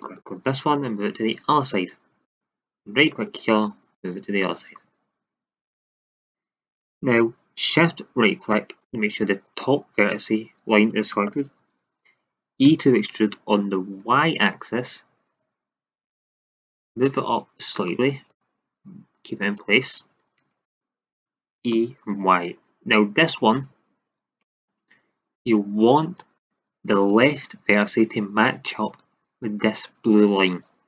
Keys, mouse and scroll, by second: 4.0 middle click, 4.8 click, 8.8-10.7 drag, 12.6 e, 16.8-22.9 drag, 21.7 e.